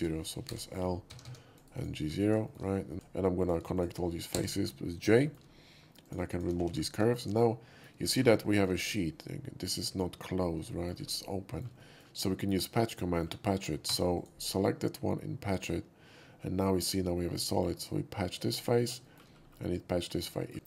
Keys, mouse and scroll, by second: 0.4 l, 1.1 Tab, 1.2 Tab, 1.5 right click, 1.7 click, 2.0 scroll down 1, 2.4 middle click, 2.9 ctrl+z, 2.9 click, 2.9 j, 3.4 click, 3.7 shift+click, 4.3 j, 4.5 middle click, 4.9 middle click, 5.2 shift+middle click, 6.0 shift+click, 6.3 shift+click, 6.6 x, 7.3-7.8 middle drag, 7.8 shift+x, 8.0 scroll down 1, 8.4 middle click, 9.0-9.6 shift+middle drag, 10.7 shift+middle click, 11.3 shift+middle drag, 11.8 shift+middle click, 12.2-13.2 shift+middle drag, 13.8 4, 14.1 click, 15.5 click, 17.4 middle click, 18.6 middle click, 19.0 shift+middle click, 19.4 shift+middle click, 20.4 shift+middle click, 20.5 x.